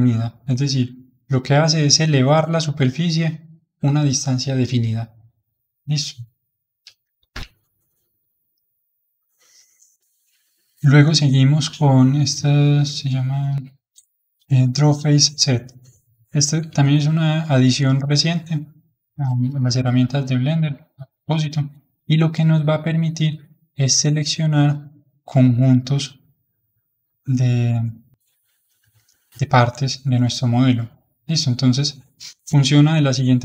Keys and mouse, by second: 7.2 alt+m, 8.8-12.3 drag, 15.8 click, 16.6-23.3 middle drag, 23.3-29.0 drag, 29.1-32.1 middle drag.